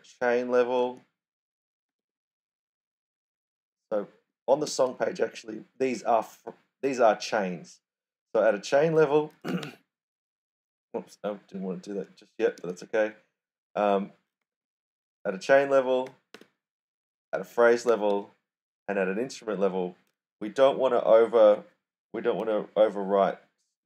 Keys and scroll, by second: 0.0-2.4 typing, 3.6-5.0 typing, 9.2-10.1 typing, 11.3-13.0 typing, 14.4-16.8 typing, 17.8 /.